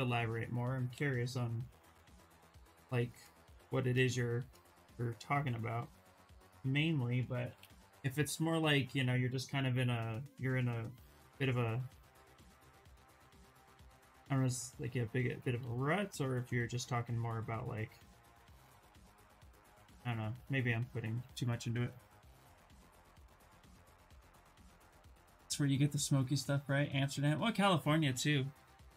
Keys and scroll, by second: 0.4-1.6 typing, 7.1 b, 7.3 b, 12.5 ctrl+z, 15.0 ctrl+z, 15.2 ctrl+z, 15.6 s, 19.0 ctrl+z, 19.2 ctrl+z, 19.4 ctrl+z, 19.6 ctrl+z.